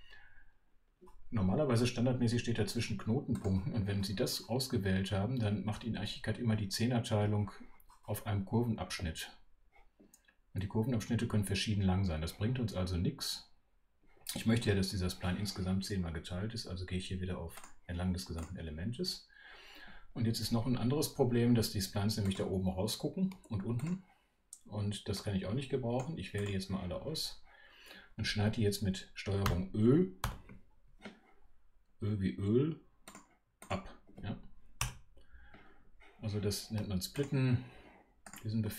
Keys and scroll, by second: 30.2 super+ö.